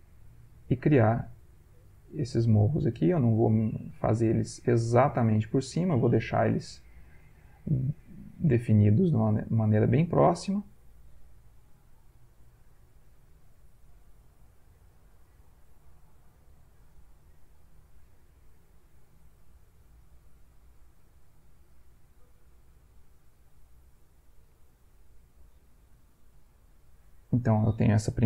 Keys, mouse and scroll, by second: 1.6 click, 2.8-4.1 drag, 4.6 click, 7.1 click, 8.1 click, 9.7 click, 11.7 click, 13.5 click, 14.8 click, 16.6 click, 17.8 click, 19.2 click, 20.8 click, 21.9 click, 23.0 click, 24.2 click, 25.3 click, 26.4 click, 27.1 click.